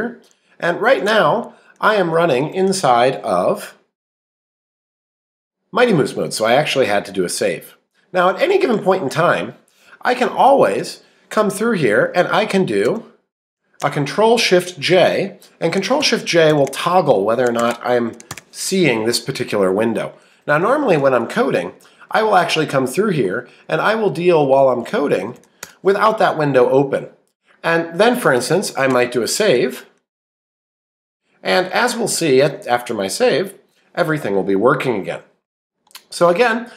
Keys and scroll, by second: 10.2 Up, 10.7 Return, 21.8 Down, 22.4 Right, 23.2 Up, 24.1 Right, 25.2 Left, 31.6 Down, 35.8 Up, 36.3 Right.